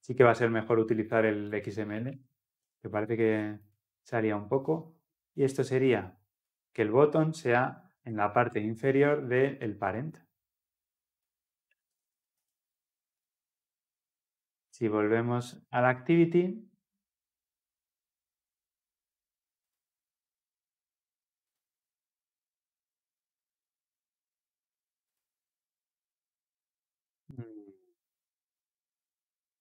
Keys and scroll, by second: 8.6 Tab.